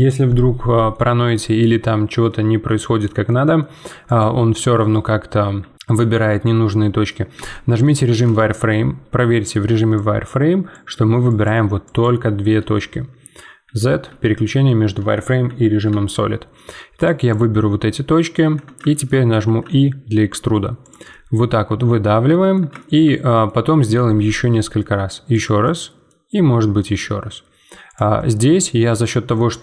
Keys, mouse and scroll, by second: 0.9-4.0 middle drag, 4.0 click, 4.5 z, 5.6 z, 5.7-7.3 middle drag, 7.3 z, 7.8-9.9 middle drag, 9.9-12.5 drag, 12.5 z, 13.2 z, 17.0-18.1 drag, 18.1 middle click, 18.4 z, 18.9 shift+middle click, 19.4 e, 21.1-23.9 middle drag, 23.9 e, 25.6 middle click, 26.4 e, 28.1-29.6 middle drag.